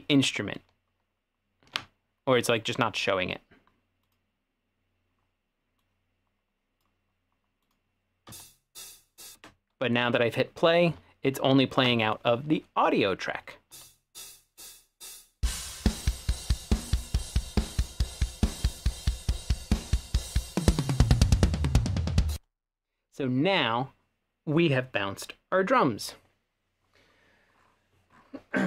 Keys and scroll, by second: 8.4 space, 9.4 space, 13.7 space, 22.4 space.